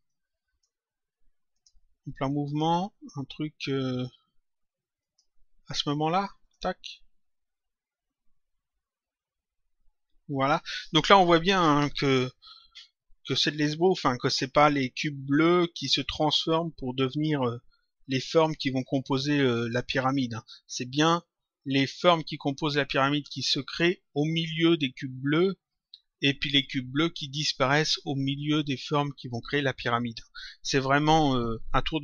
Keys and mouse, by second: 0.0 click, 1.5 click, 4.9 click, 6.3 click.